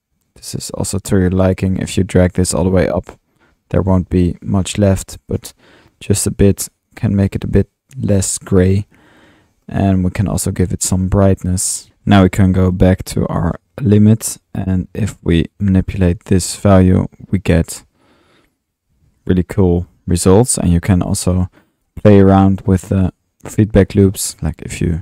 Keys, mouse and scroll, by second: 2.3 click, 5.3 drag, 12.4-13.9 alt+drag, 13.9 typing, 14.2 click, 21.9-22.4 drag, 22.7 click, 23.9 click, 24.3 typing, 24.4 click.